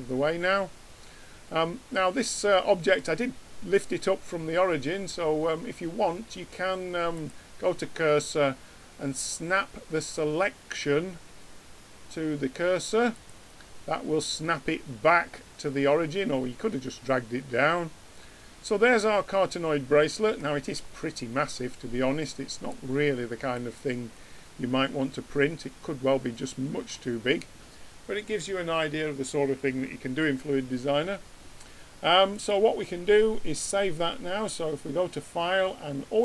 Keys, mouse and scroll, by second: 0.0-1.7 middle drag, 7.1-9.1 drag, 16.6-18.5 middle drag, 22.6-24.5 drag, 24.5-25.9 middle drag, 32.3 ctrl+q, 32.3-34.1 drag.